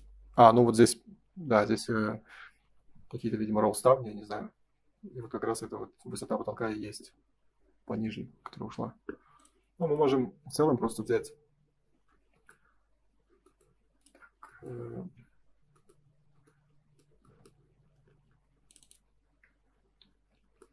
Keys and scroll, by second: 20.2 Escape.